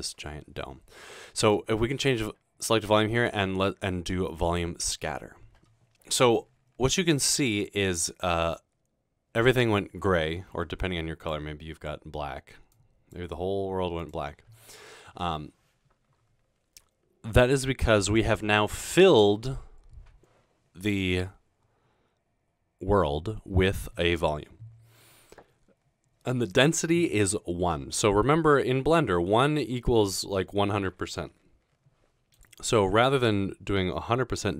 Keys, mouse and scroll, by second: 1.4 click, 4.5 click, 11.3 click, 12.8 click, 32.4 click.